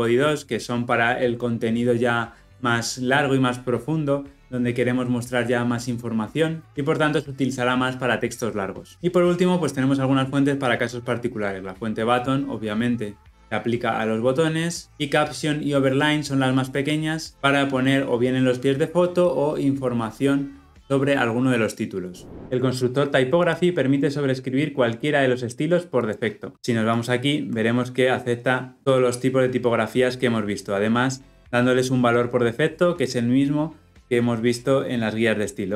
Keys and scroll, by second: 26.5 Escape, 27.0 ctrl+b.